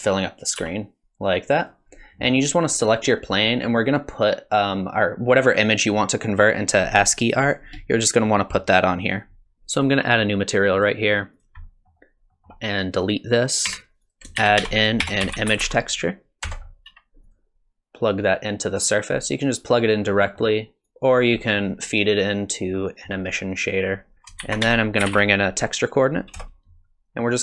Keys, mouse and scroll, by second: 0.6 s, 1.1 s, 1.6 click, 10.8 click, 11.4 click, 11.6 middle click, 12.3 middle click, 13.0 click, 13.7 x, 14.0 click, 14.4 shift+a, 18.3 click, 20.2 middle click, 20.9 click, 21.4 middle click, 22.8 middle click, 24.1 middle click, 24.1 click, 24.4 shift+a.